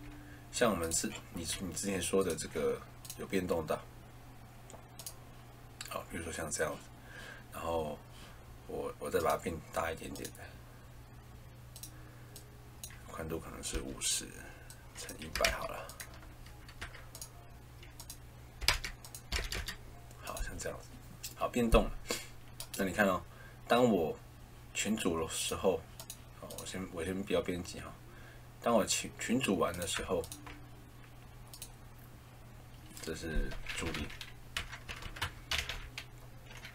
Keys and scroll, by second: 13.6 5, 15.0-16.7 typing, 18.2-19.1 typing, 20.3 0, 33.5-35.4 typing.